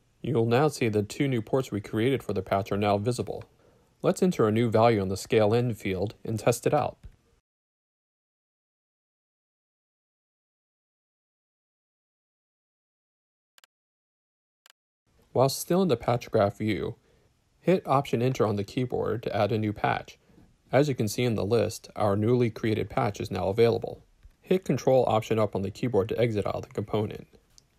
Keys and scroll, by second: 0.5 ctrl+alt+Up, 4.4 Right, 6.7 8, 6.9 Return, 13.7-14.6 typing, 15.8 alt+Return, 24.7 ctrl+alt+Up.